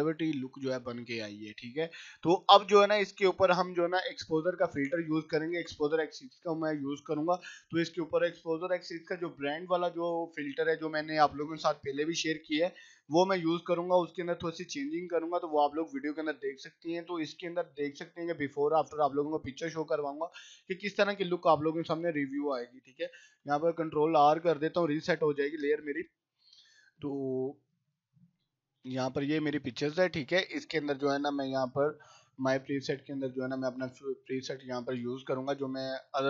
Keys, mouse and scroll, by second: 0.8 click, 2.1 right click, 2.4 click, 23.1 ctrl+r, 28.1-29.0 scroll down 1, 29.0 scroll up 1, 30.7-31.3 scroll down 1, 31.7 click, 32.2-33.0 scroll down 1.